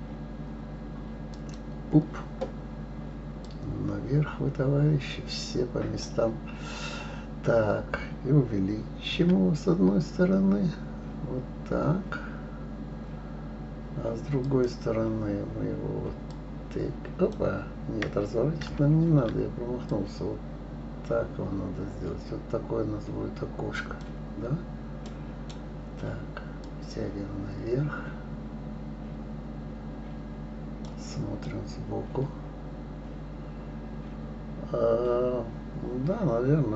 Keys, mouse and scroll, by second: 3.4-6.4 drag, 9.1 s, 16.3-18.6 drag, 18.6 ctrl+z, 19.9-22.9 drag, 25.0-26.6 right drag, 26.6-29.6 drag, 31.4-34.5 middle drag.